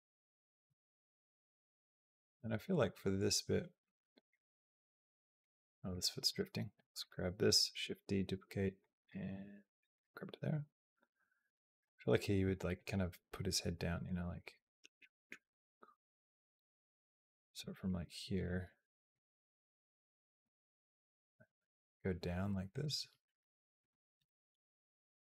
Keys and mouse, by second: 0.0 middle click, 0.6 shift+middle click, 1.6-4.1 drag, 5.7 click, 6.1 click, 6.8 click, 7.2 click, 7.5 shift+d, 9.1 g, 10.3-11.7 drag, 12.5 click, 13.9-17.1 drag, 17.4 g, 19.0-20.1 drag, 20.1 g, 20.3 g, 24.0 KP_0, 25.2 g.